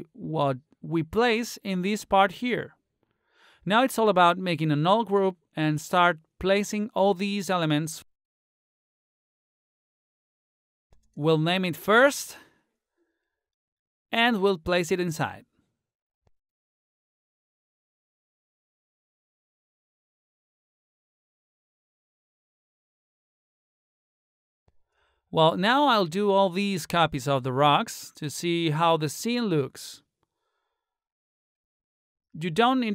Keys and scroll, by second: 11.1 Caps_Lock, 11.7-13.1 typing, 18.4-19.5 typing, 22.2-23.5 typing.